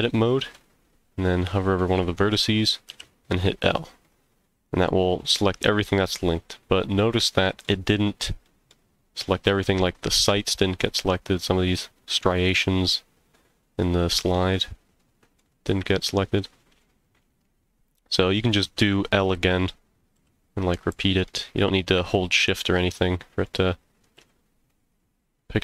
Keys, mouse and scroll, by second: 0.0 middle click, 2.9 l, 4.0 middle click, 5.5-7.6 middle drag, 7.7 scroll up 1, 8.4 middle click, 8.8 scroll down 1, 9.8 middle click, 11.0 middle click, 12.9-15.4 middle drag, 15.9 shift+middle click, 17.0 middle click, 17.9 scroll up 1, 20.1 l, 20.9 l, 21.2-23.4 middle drag, 24.1 l, 24.7-25.6 middle drag.